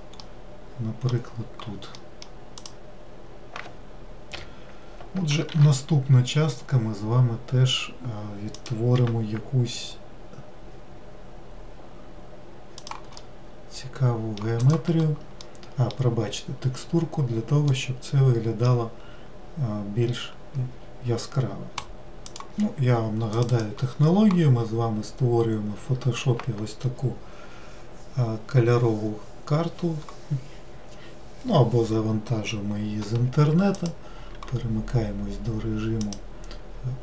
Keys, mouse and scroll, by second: 0.6-3.0 middle drag, 3.0 click, 4.8 l, 6.0 shift+d, 9.4 r, 13.6-15.0 middle drag, 15.0 click, 15.8 middle click, 16.7-17.6 scroll down 1, 17.6-18.1 scroll down 1, 18.1-21.3 middle drag.